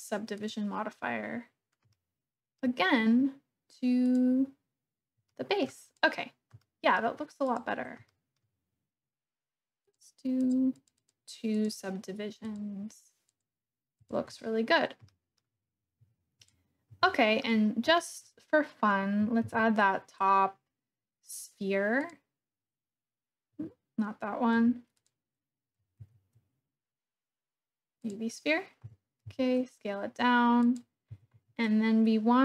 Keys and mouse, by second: 0.4-1.5 drag, 2.0 shift+click, 4.2 click, 5.3 shift+click, 6.6 shift+click, 7.4 click, 8.1 shift+middle click, 9.8 click, 10.3 click, 11.0 click, 11.5 click, 12.5 click, 13.9 click, 15.0-15.4 shift+drag, 17.1 shift+click, 18.2 click, 19.4 shift+a, 24.5 x, 25.9 shift+a, 28.9 g, 29.2 s, 30.7 click, 31.1 g, 31.3 z.